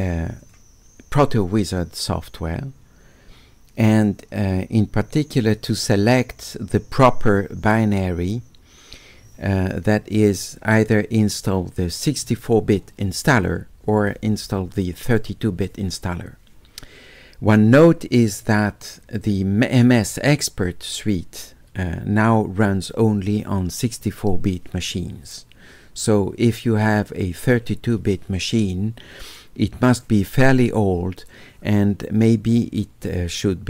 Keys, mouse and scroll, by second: 0.4 click, 5.8 click.